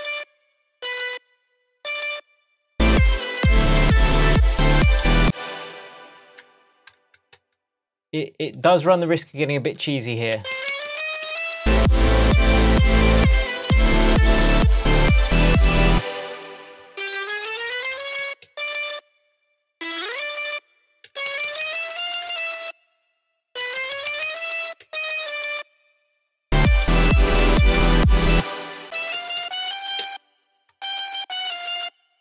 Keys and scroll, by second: 1.0 BackSpace, 2.0 BackSpace, 5.2 space, 7.0 super+z, 10.3 Up, 15.9 space, 17.1 Up, 21.0 Down, 23.6 Up, 28.3 space, 29.4 Up, 30.9 alt+Left.